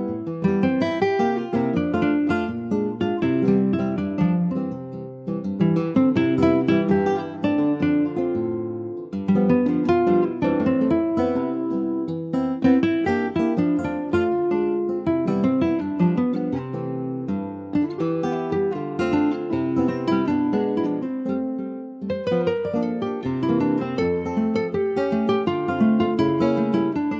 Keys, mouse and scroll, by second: 1.0 s, 2.5 middle click, 3.4 click, 5.0 middle click, 5.2 scroll up 1, 5.4-7.7 shift+middle drag, 7.7 click, 12.0-13.6 middle drag, 13.6 click, 14.9-17.0 middle drag, 17.0 Tab, 17.4 click, 18.3 click, 18.4 3, 19.0 click, 19.6 middle click, 20.2 ctrl+s, 20.6 click, 21.6 middle click, 21.9 2, 22.6 click, 23.3 shift+click, 24.2 ctrl+b, 26.8 Tab, 27.0 click.